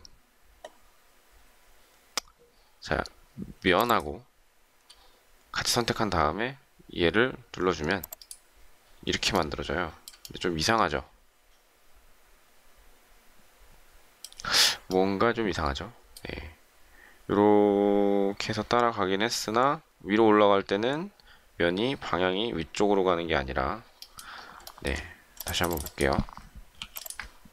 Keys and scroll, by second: 26.7 m.